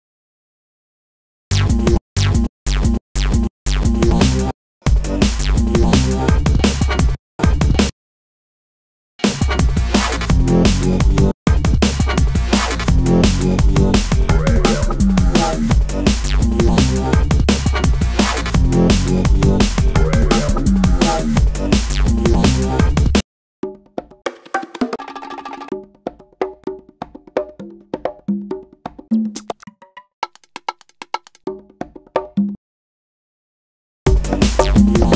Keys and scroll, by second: 0.1 space, 7.7 space, 17.6 super+t, 19.4 b, 21.7 space, 23.5 Down, 25.2 Up, 28.2 Down, 32.6 space, 34.5 space.